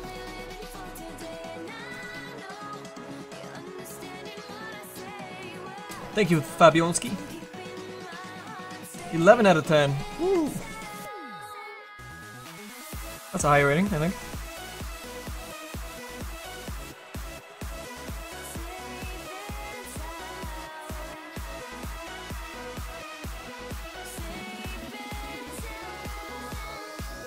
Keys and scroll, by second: 13.4 s, 14.9 s, 15.9 s.